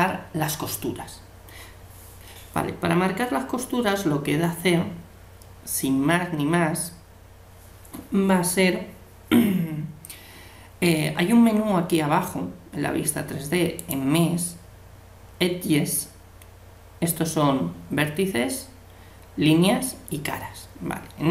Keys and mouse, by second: 13.8-15.5 drag.